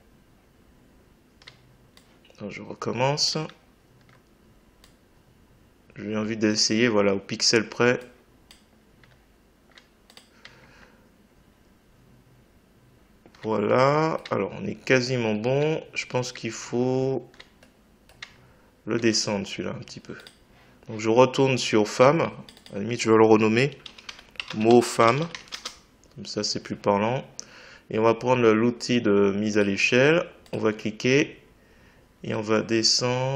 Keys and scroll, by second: 23.8 m, 24.4 space, 24.7 f, 25.5 Return.